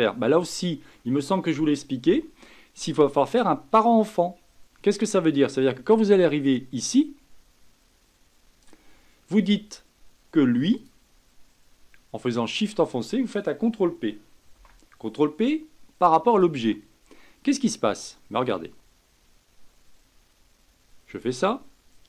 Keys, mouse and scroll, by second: 10.7 click, 12.5 shift+click, 14.5 ctrl+p, 18.5-21.7 drag.